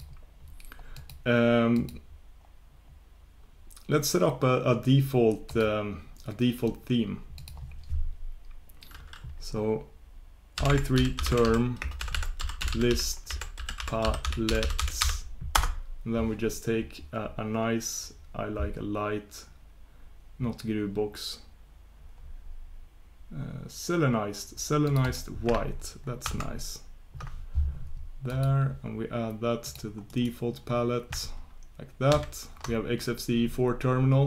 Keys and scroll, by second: 2.5 ctrl+super+Return, 28.3 ctrl+super+Return.